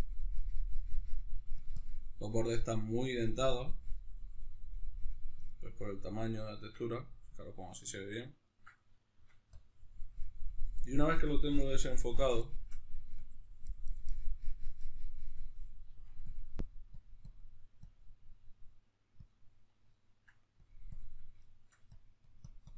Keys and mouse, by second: 1.0 f, 1.5-5.2 drag, 5.2-9.3 ctrl+middle drag, 9.3-12.2 drag, 12.2 shift+middle click, 12.9-16.1 drag, 15.6 f, 16.3-19.7 drag, 19.7 ctrl+middle click, 20.3 click, 21.2 shift+middle click, 21.7-22.7 drag.